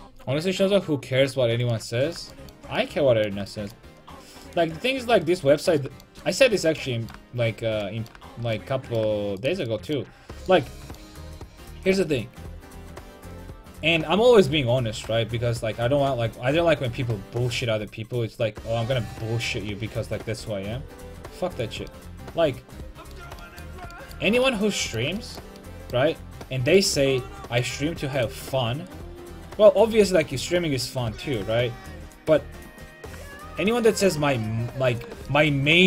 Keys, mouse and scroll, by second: 1.8 middle click, 4.5-5.9 right drag, 5.9-8.0 middle drag, 9.4-11.9 right drag, 11.9-14.7 drag, 22.2 middle click, 26.7 middle click, 28.2-30.0 right drag, 28.9-31.6 drag, 35.3-35.8 middle drag.